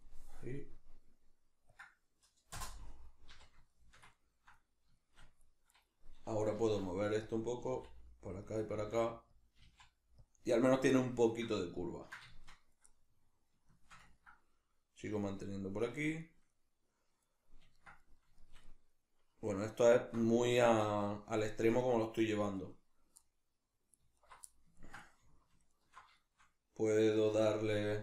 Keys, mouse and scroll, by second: 3.7-5.7 shift+middle drag, 5.7 right click, 6.6 g, 7.4 click, 7.6 g, 8.5 click, 8.7 g, 9.4 click, 9.6 g, 10.3 click, 11.0-24.2 shift+middle drag, 24.2 alt+right click, 24.5-25.7 ctrl+middle drag, 25.7 alt+shift+right click, 26.2-28.0 shift+middle drag.